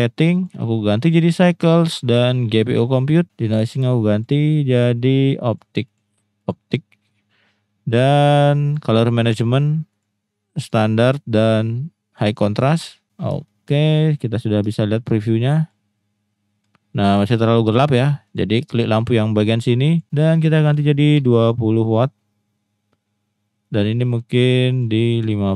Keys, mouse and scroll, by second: 0.5-1.1 drag, 3.2 click, 4.1 click, 4.4 click, 4.9-5.6 drag, 5.8-6.5 drag, 10.1-10.7 drag, 11.1-12.3 drag, 13.5 shift+middle click, 14.8 shift+middle click, 18.3-20.0 drag, 20.0-21.9 drag, 23.6 click, 24.4 click, 24.7-25.5 drag.